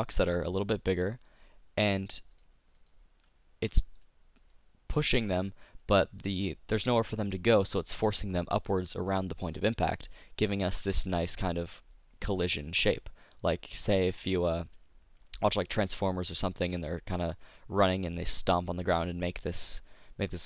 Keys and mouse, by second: 4.3-6.5 drag, 9.7-11.1 drag, 14.8-16.6 drag, 16.6 middle click, 19.7-20.4 middle drag.